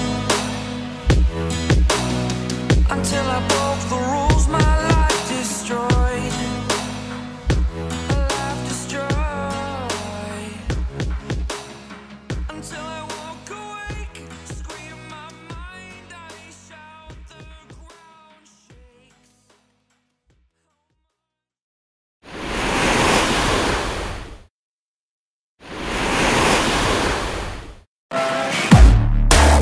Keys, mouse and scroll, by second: 1.0 scroll down 3, 1.3 shift+middle click, 7.5 shift+middle click, 10.8 shift+middle click, 14.8-15.1 scroll down 1, 15.1 shift+middle click, 20.7 shift+middle click.